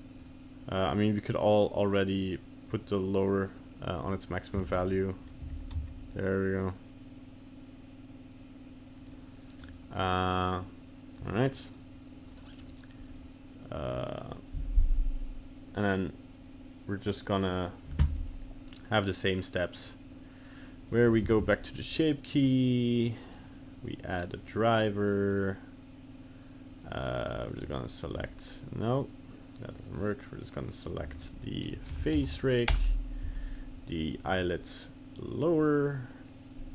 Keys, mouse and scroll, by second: 0.2 click, 2.2 click, 2.8 click, 4.0 right click, 4.6 ctrl+Tab, 4.9 right click, 5.4 g, 9.6 right click, 12.6 click, 17.1 click, 17.5 click, 20.9 right click, 21.3 ctrl+Tab, 21.5 right click, 22.4 right click, 23.0 click, 23.3 click, 25.4 right click, 28.9 right click.